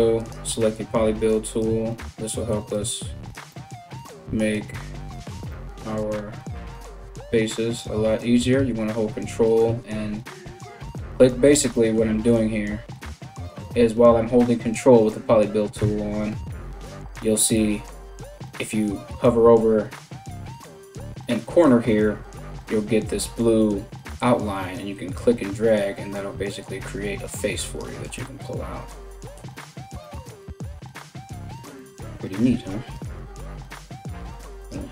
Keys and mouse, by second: 6.6-30.6 ctrl+right drag, 30.6 click, 30.6 g, 31.5 middle click, 31.9 right click, 32.0-33.1 middle drag, 32.1 g, 33.1 right click, 33.2-34.9 middle drag, 33.7 g.